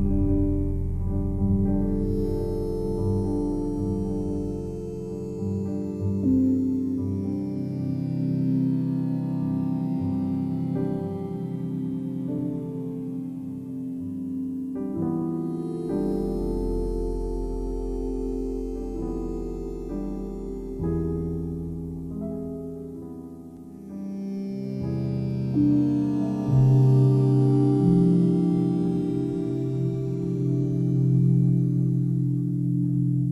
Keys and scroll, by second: 0.8 ctrl+j, 1.8 ctrl+j, 2.8 0, 2.9 Right, 3.3 ctrl+z, 4.1 Up, 4.2 Left, 4.3 Down, 4.4 Left, 6.7 ctrl+d, 7.4 ctrl+e, 9.6 ctrl+t.